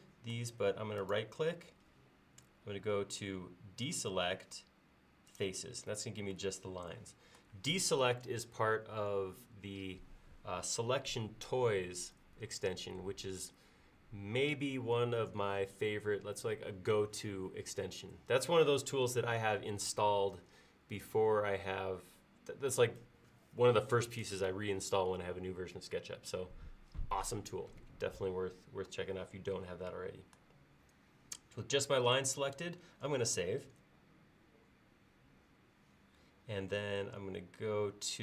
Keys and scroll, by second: 33.7 ctrl+s.